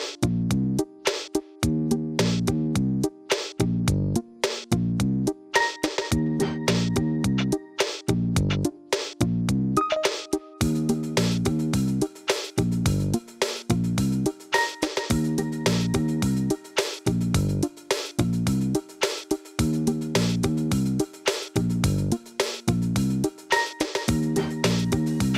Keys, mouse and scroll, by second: 1.5 shift+d, 3.1 KP_1, 5.4 shift+click, 6.1 s, 7.0 g, 8.4 s, 10.1 shift+z, 10.4 click, 10.7 middle click, 11.0 click, 11.3 shift+click, 11.6-12.3 scroll up 2, 12.3 g, 14.4 KP_3, 15.8 g, 17.4-18.1 middle drag, 18.1-18.9 scroll up 2, 18.9 g, 21.5 scroll down 2, 22.1 middle click, 22.4-23.5 scroll down 3, 22.7 middle click, 23.5 drag, 23.7-24.1 scroll down 1, 24.1-24.7 middle drag, 24.7 scroll up 1, 25.0-25.3 shift+middle drag.